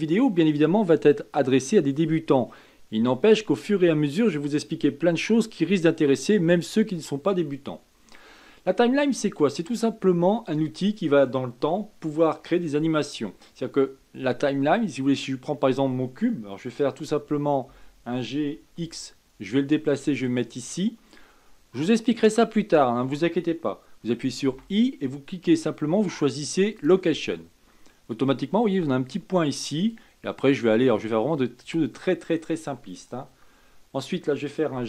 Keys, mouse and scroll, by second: 10.5-13.5 scroll down 2, 29.9-33.1 drag.